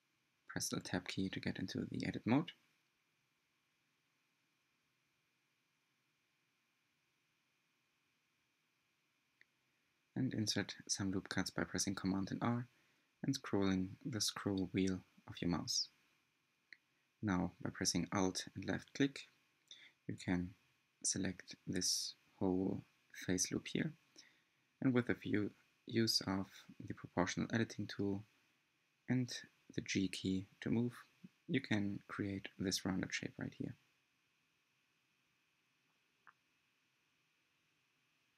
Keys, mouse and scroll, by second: 0.1 middle click, 0.6 scroll down 9, 1.4 click, 2.1 alt+z, 3.3 s, 7.5 middle click, 8.4 alt+z, 8.7 scroll up 2, 9.0-10.1 middle drag, 10.1 scroll up 2, 10.9 click, 11.4-11.8 scroll up 3, 11.9 r, 15.4 3, 16.7 alt+click, 17.3 click, 18.5 g, 23.8 Tab, 24.5 g, 27.9-28.8 scroll up 8, 28.8-29.2 shift+middle drag, 29.2 shift+scroll down 1, 29.5 Tab, 30.6 alt+z, 31.6 1, 31.8 click, 32.6 scroll down 3, 32.9 shift+middle click, 33.7 shift+click, 34.1 scroll up 3, 34.3 shift+middle click, 34.9 g, 35.8 click, 36.3 g, 38.2 r.